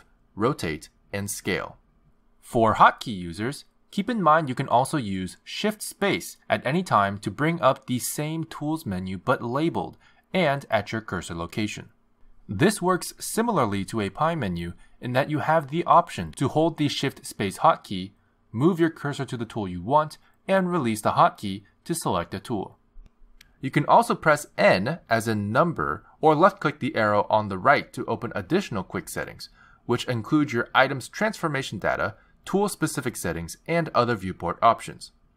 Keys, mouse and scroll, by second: 5.9 shift+space, 9.4 shift+space, 14.4 shift+space, 18.8 shift+space, 21.2 shift+space, 23.3 shift+space, 26.5 n, 28.0 n, 29.7 click, 33.1 click, 34.2 click.